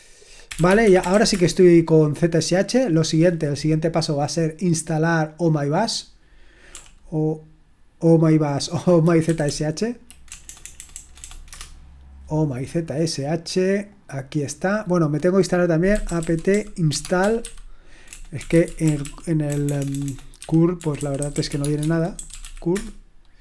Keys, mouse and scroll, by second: 0.3-1.6 typing, 4.4-6.1 drag, 6.7 typing, 9.2 Down, 9.4 Down, 10.3-11.2 typing, 11.6 Return, 13.9-16.1 drag, 16.1-23.0 typing.